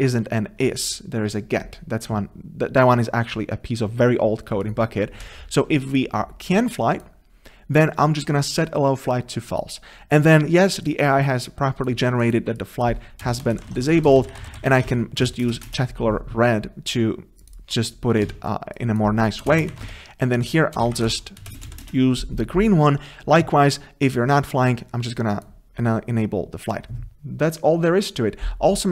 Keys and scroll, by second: 15.3 Return, 18.2 Return, 18.3 ctrl+c, 19.9 ctrl+v, 20.8 ctrl+BackSpace, 21.5 Return.